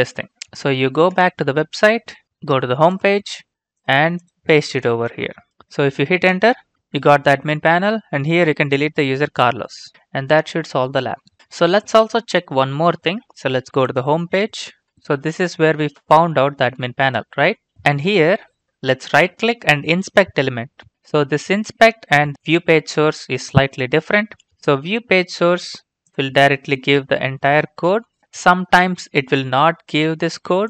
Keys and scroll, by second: 1.4 alt+Tab.